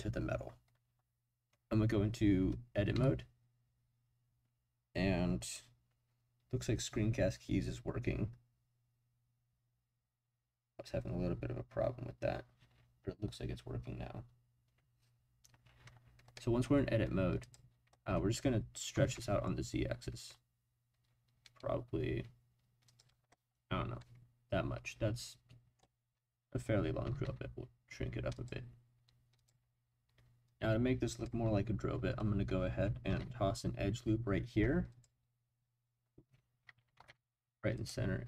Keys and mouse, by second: 3.0 Tab, 16.3 middle click, 17.5 click, 18.9 s, 19.1 z, 22.8 click, 24.0-25.7 middle drag, 25.7 click, 27.0 s, 27.2 z, 28.3 click, 29.3 click, 30.5 click, 33.1 ctrl+r, 36.9 ctrl+r.